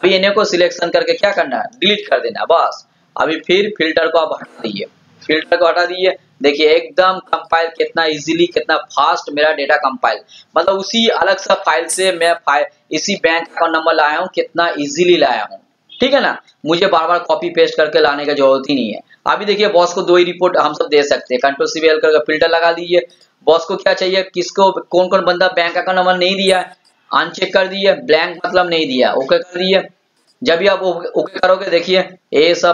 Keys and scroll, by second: 1.1 shift+Down, 5.5 ctrl+shift+l, 21.3 ctrl+shift+l.